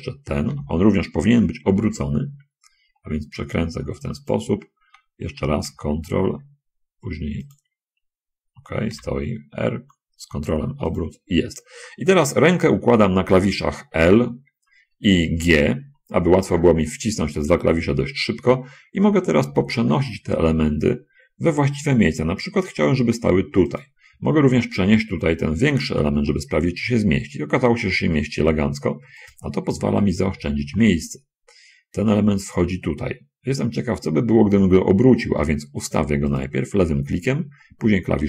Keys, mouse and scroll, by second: 0.9 l, 2.2 r, 4.6 ctrl+click, 5.4 r, 7.8 ctrl+click, 9.3 g, 11.3 click, 19.8 l, 20.2 g, 24.1 click, 25.7 l, 26.0 g, 29.6 click, 30.8 l, 31.0 g, 36.7 click.